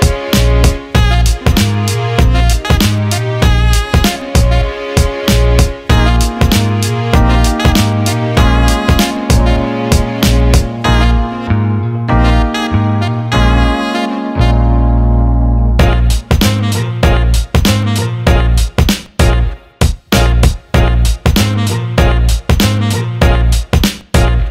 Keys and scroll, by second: 6.5 1, 7.4 shift+', 9.5 1, 10.1 shift+'.